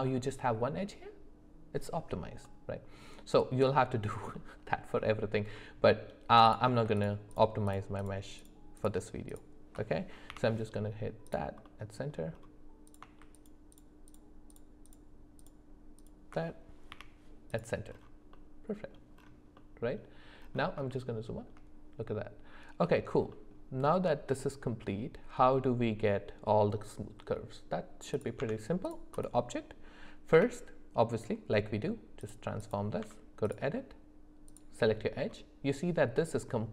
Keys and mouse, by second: 2.4 middle click, 4.3 middle click, 5.5 middle click, 7.0 ctrl+shift+click, 7.3 ctrl+shift+click, 7.7 ctrl+shift+click, 8.0 ctrl+shift+click, 8.4 ctrl+shift+click, 9.3 ctrl+shift+click, 10.3 m, 11.6 middle click, 12.9 click, 13.3 ctrl+shift+click, 13.7 ctrl+shift+click, 14.5 ctrl+shift+click, 15.4 ctrl+shift+click, 16.0 ctrl+shift+click, 16.9 m, 18.3 middle click, 19.5 middle click, 20.9 shift+middle click, 23.3 middle click, 28.1 click, 28.4 Tab, 30.3 q, 33.0 Tab, 34.5 click.